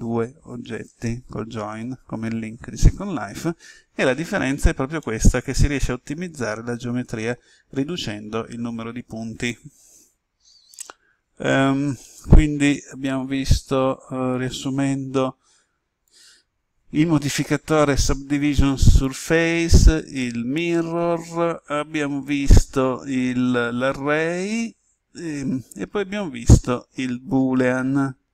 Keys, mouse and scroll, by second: 16.0-17.1 drag.